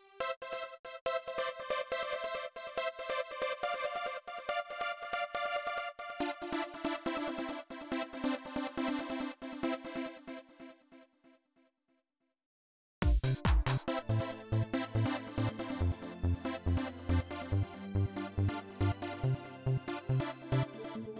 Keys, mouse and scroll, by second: 2.2 click, 8.0 click, 9.5 space, 9.9 click, 12.2 click, 12.7 space, 14.5-21.1 drag.